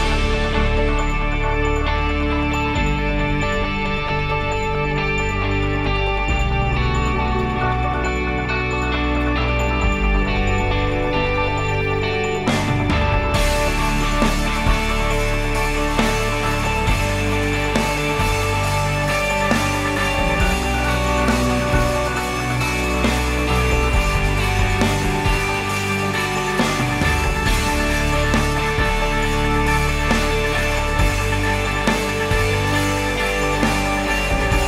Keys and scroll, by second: 20.0-23.8 typing, 28.4-31.0 typing, 31.6 Return.